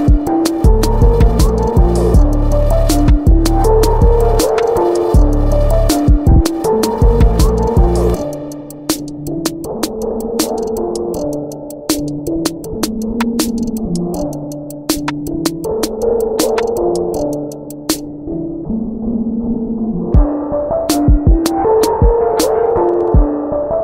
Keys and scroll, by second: 0.1 ctrl+z, 0.9 ctrl+t, 7.3 v, 17.3 b.